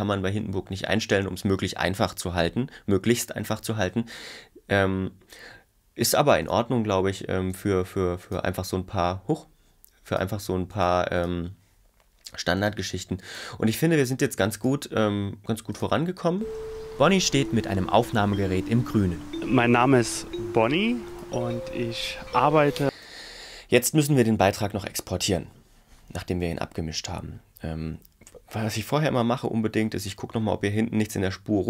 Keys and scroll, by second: 16.4 space, 22.9 space.